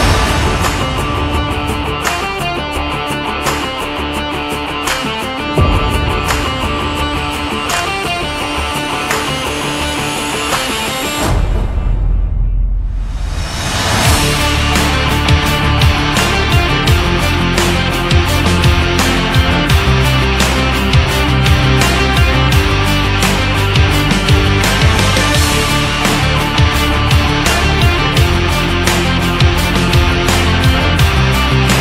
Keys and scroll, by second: 1.0 shift+x.